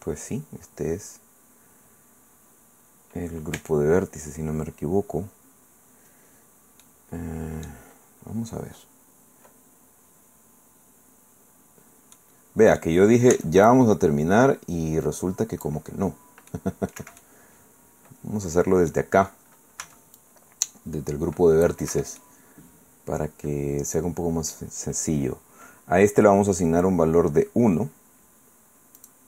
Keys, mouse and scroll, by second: 3.5 Tab, 6.8-7.9 drag, 7.9-8.6 scroll up 1, 12.1 click, 13.3 c, 13.7-15.8 drag, 16.5 middle click, 16.7 click, 17.0 Escape, 17.1 middle click, 17.5-19.1 drag, 19.1 middle click, 19.8 c, 20.4-21.8 drag, 21.9 Escape, 22.2-24.7 drag, 29.0 click.